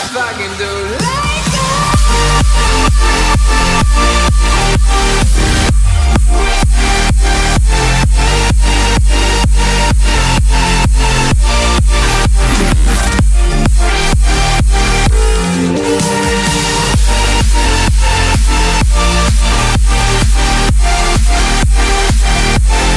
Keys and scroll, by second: 6.9 [, 12.9 ctrl+z.